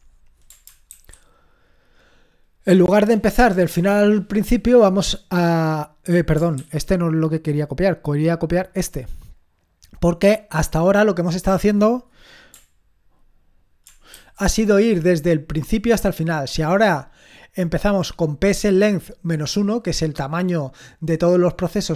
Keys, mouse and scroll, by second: 0.9 ctrl+alt+v, 6.6 ctrl+c, 8.6-10.0 drag, 10.6-11.8 drag, 14.2 ctrl+alt+v.